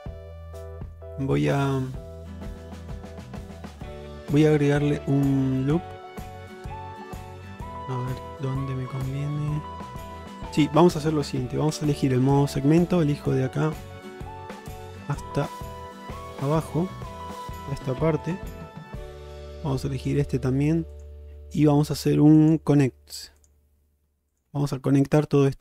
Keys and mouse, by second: 0.0 click, 0.8 shift+middle click, 2.7 Tab, 4.7 middle click, 5.8-8.0 middle drag, 9.4 middle click, 10.2 shift+middle click, 11.8 2, 12.8 click, 13.6 shift+click, 14.3 shift+click, 15.1 shift+click, 16.1 shift+click, 16.6 shift+middle click, 17.5 shift+click, 18.3 shift+click, 21.0 shift+click, 22.5 shift+click.